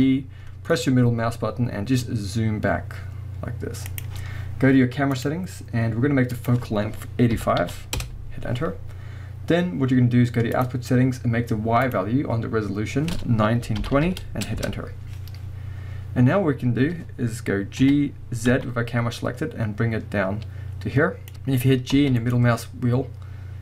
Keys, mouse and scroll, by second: 0.4-4.0 middle drag, 4.0 click, 5.2-5.8 drag, 6.3-10.7 drag, 8.0 Return, 11.8-21.3 drag, 14.7 Return, 15.3-16.3 scroll down 1, 16.3 scroll up 1, 17.8 g, 21.3-21.8 scroll up 1, 21.9 g.